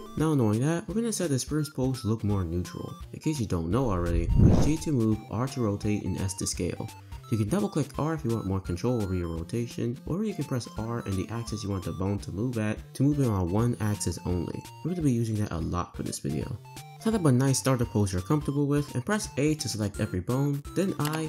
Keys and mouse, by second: 0.4 click, 4.5 g, 5.2 r, 6.1 s, 7.4 r, 10.5 r, 16.8 click, 17.6 click, 19.1 a, 21.0 i.